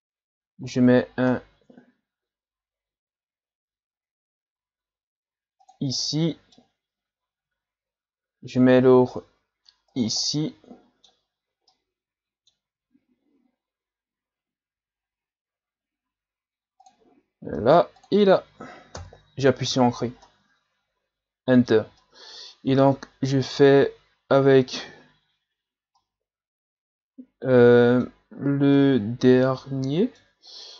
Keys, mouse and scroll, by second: 1.1 scroll up 3, 1.3-2.6 scroll down 1, 6.0 middle click, 6.6 scroll down 1, 10.3-13.4 middle drag, 13.4 scroll up 2, 19.7-20.3 scroll down 3, 20.3-23.1 middle drag, 23.1-24.0 scroll up 1, 26.0-28.3 middle drag, 28.3-28.7 scroll up 1, 28.7-30.5 middle drag, 30.5-30.7 scroll up 2.